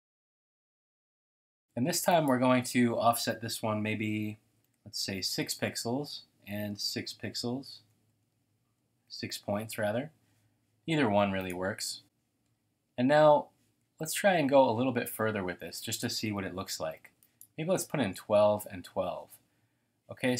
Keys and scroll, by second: 4.6-10.0 typing, 13.8 typing, 16.6-18.8 typing.